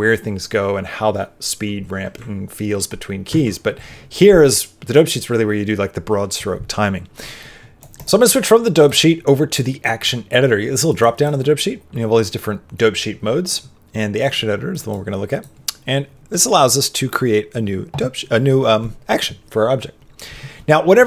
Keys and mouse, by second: 3.2 ctrl+Tab, 8.7-10.8 drag, 11.2-15.4 drag.